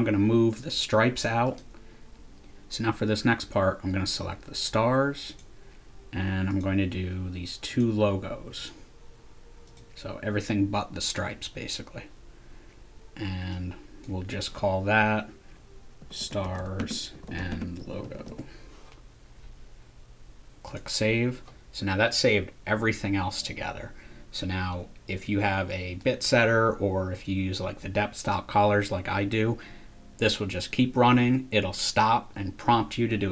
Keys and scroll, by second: 15.8-18.7 typing.